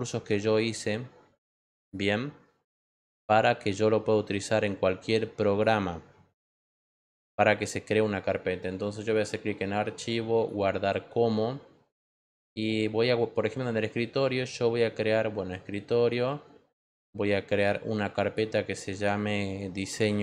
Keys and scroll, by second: 19.6-20.2 typing.